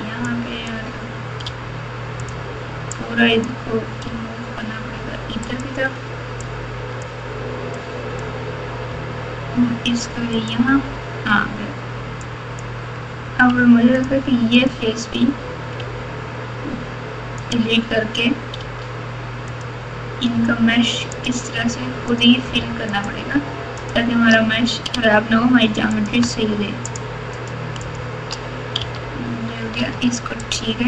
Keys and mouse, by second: 0.2 click, 2.9 click, 3.1 click, 4.0 g, 6.5 click, 7.8 click, 8.8 g, 12.2 click, 12.4 click, 13.5 3, 14.0 click, 15.7 x, 18.6 1, 19.5 click, 21.2 shift+click, 22.1 shift+click, 24.9 f, 25.9 click, 26.8 shift+click, 27.9 shift+click, 28.8 f, 29.7 alt+z, 30.4 alt+click.